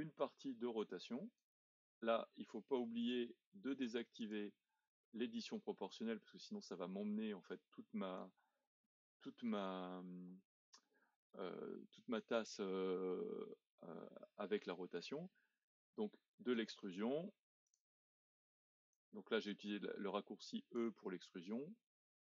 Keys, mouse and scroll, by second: 2.9 z, 4.2 click, 5.9 click, 8.5-10.1 middle drag, 10.1-10.8 scroll up 1, 10.8 middle click, 11.6-14.7 scroll down 1, 16.6 e, 18.9 click, 21.2 e.